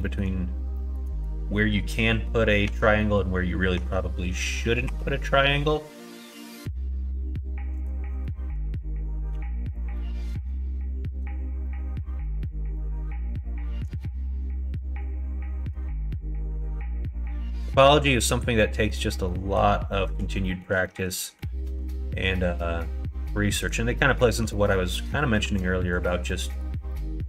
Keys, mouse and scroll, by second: 0.7 shift+middle click, 2.1 middle click, 2.6 Tab, 3.0 middle click, 3.7 Tab, 4.8 ctrl+r, 9.3 ctrl+r, 10.4 middle click, 11.2 middle click, 11.8 middle click, 12.9 middle click, 13.6 shift+middle click, 14.2 middle click, 15.1 middle click, 15.6 shift+middle click, 18.8 middle click, 19.2 middle click, 20.0 middle click, 20.5 shift+middle click, 20.9 middle click, 21.6 ctrl+r, 24.6 middle click, 25.4 ctrl+r.